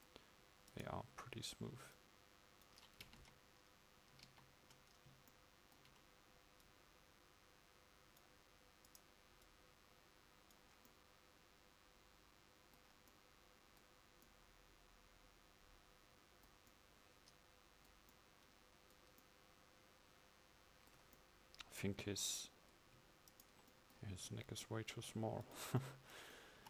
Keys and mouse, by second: 3.3 KP_1, 4.3 ctrl+KP_1, 6.8-11.0 drag, 10.7 right click.